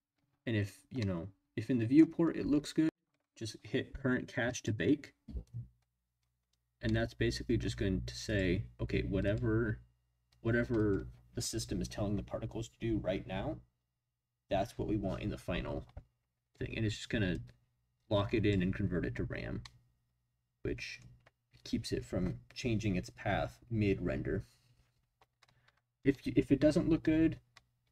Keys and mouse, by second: 1.0-2.0 drag, 2.4 space, 4.6 click, 6.8 middle click, 8.3 click, 8.5 click, 9.3-11.0 drag, 17.5-18.5 drag, 19.6-21.1 middle drag.